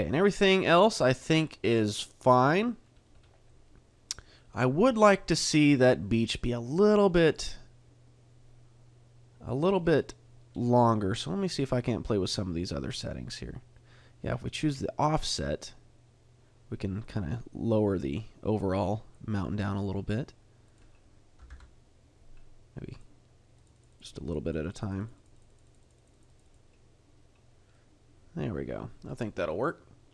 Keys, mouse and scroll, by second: 0.2 middle click, 3.1-4.7 scroll down 2, 3.5 middle click, 6.6 click, 9.8 middle click, 10.5-11.4 scroll up 1, 12.1 click, 20.6 click, 24.2 click, 24.4 click, 24.7 click, 25.0 click, 25.3 click, 25.6 click, 25.9 click, 26.2 click, 26.4 click, 26.7 click, 27.7 middle click, 29.5 middle click.